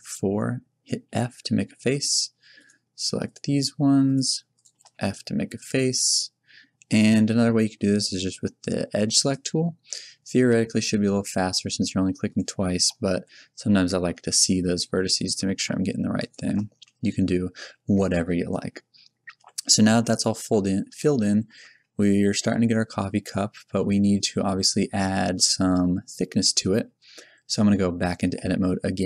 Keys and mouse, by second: 1.0 f, 2.5-4.0 drag, 4.9 f, 13.2 f, 14.9 right click, 15.5-16.7 middle drag, 16.7 f, 19.3 Tab, 27.0 middle click, 28.2 Tab.